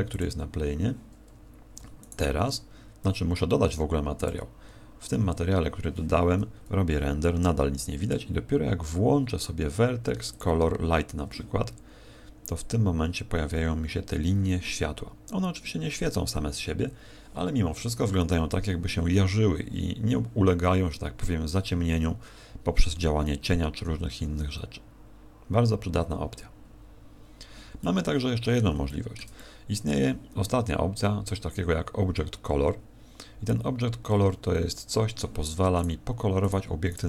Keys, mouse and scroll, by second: 1.3 Escape, 1.3 click, 2.0 right click, 4.2 click, 26.6 Escape, 26.6 scroll down 4, 27.8 middle click, 28.8 shift+middle click, 29.3 middle click, 33.2-34.8 scroll down 6, 35.8 right click, 36.4 right click, 36.8 right click.